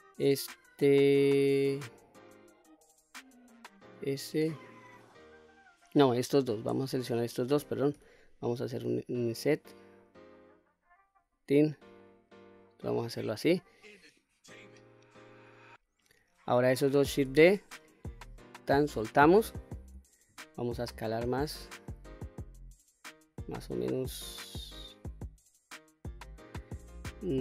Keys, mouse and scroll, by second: 1.1-5.8 middle drag, 6.2 click, 7.0 shift+click, 7.9 i, 11.2 click, 12.0-13.2 middle drag, 14.7-15.6 middle drag, 17.3 shift+d, 18.5 right click, 20.3 s.